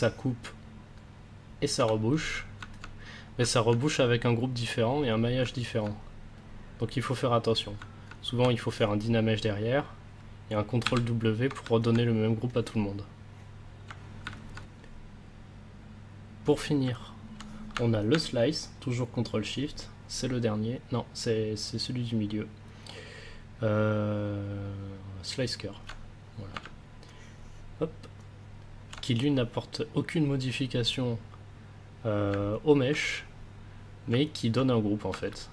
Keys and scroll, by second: 10.8 ctrl+w, 35.2 ctrl+s.